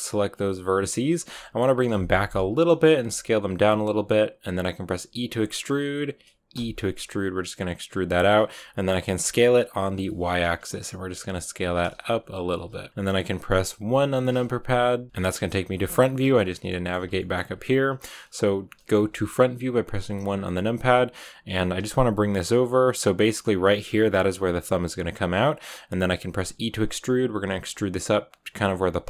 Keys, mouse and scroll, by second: 0.0 r, 0.6 b, 0.6 s, 1.1 g, 2.4 s, 2.9 g, 4.8 r, 8.0 r, 9.0 s, 11.4 g, 11.5 s, 11.9 g, 13.8 KP_1, 15.1-16.2 shift+middle drag, 16.2-16.6 scroll up 3, 16.6 shift+middle click, 17.4-18.7 scroll up 2, 18.7-21.5 shift+middle drag, 21.5 r, 21.9 g, 24.7 g, 26.2 e, 27.4 r, 27.7 g, 28.4 r, 28.6 g.